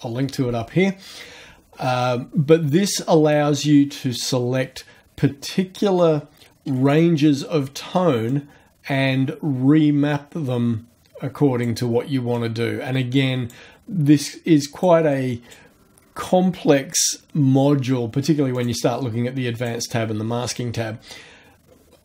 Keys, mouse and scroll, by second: 8.3-11.8 drag, 12.3-13.7 drag, 14.1 click, 15.1 click, 18.6 click, 19.6 click, 20.5 click.